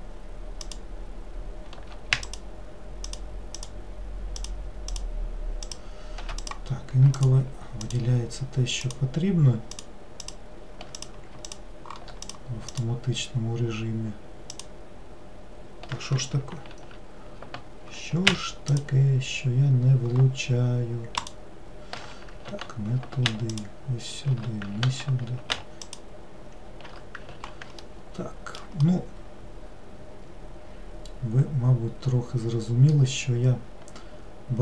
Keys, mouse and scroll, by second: 0.7 alt+click, 2.3 alt+shift+click, 3.2 alt+shift+click, 3.6 alt+shift+click, 4.5 alt+shift+click, 5.0 alt+shift+click, 5.7 alt+shift+click, 6.5 click, 7.2 alt+click, 7.9 alt+click, 8.9 alt+click, 9.8 alt+click, 10.3 alt+click, 11.0 click, 11.5 alt+click, 12.3 click, 12.8 alt+click, 14.6 alt+click, 16.8 ctrl+z, 18.8 alt+shift+click, 21.2 alt+shift+click, 22.6 ctrl+z, 23.6 alt+shift+click, 24.9 ctrl+z, 25.9 alt+shift+click, 27.4 ctrl+z, 27.9 alt+middle click, 28.9-31.9 middle drag.